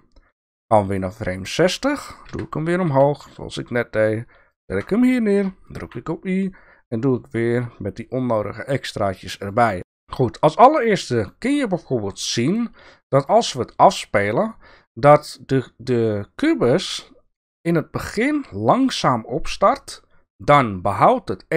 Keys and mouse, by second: 2.3 g, 5.8 i.